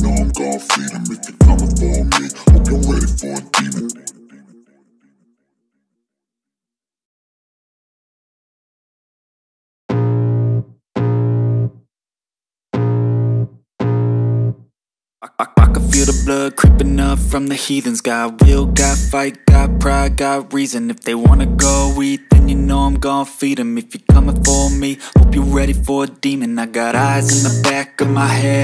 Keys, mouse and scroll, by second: 0.7 click, 1.8 click, 5.5-7.5 right drag, 7.5 click, 9.8-12.2 drag, 12.8 click, 13.8 click, 14.8 click, 15.9 click, 17.9 click, 20.1-21.8 drag, 21.8-22.3 scroll down 2, 22.3-23.6 scroll up 1, 24.3 d, 25.2 g, 27.6 click.